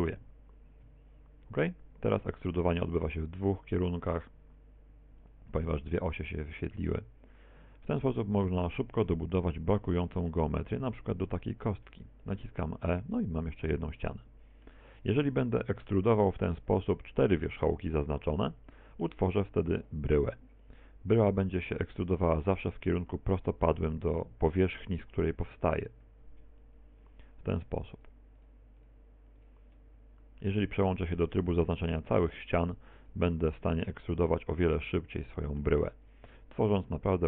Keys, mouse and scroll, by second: 0.9 e, 5.4 click, 5.8 middle click, 8.9 right click, 9.9 right click, 10.4 shift+right click, 10.9 middle click, 11.9 e, 12.4 click, 12.8 middle click, 18.8 shift+right click, 19.6 e, 22.0 click, 23.0 right click, 23.7 shift+right click, 24.2 right click, 24.8 shift+right click, 25.2 middle click, 26.1 e, 26.8 click, 27.5 right click, 28.0 shift+right click, 28.4 right click, 28.8 right click, 29.4 shift+right click, 29.7 e, 30.6 click, 32.0 click, 33.0 right click, 33.4 e, 34.2 right click, 34.4 e, 34.8 click, 35.2 middle click, 36.1 right click, 36.3 e, 36.9 click.